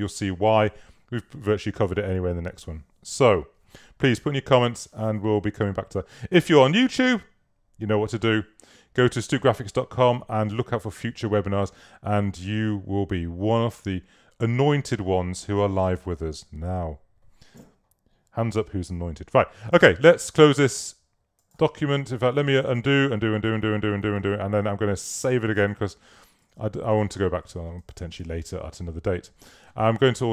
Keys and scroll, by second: 20.4 super+w, 22.2 super+z, 26.5 super+s, 28.2 super+w.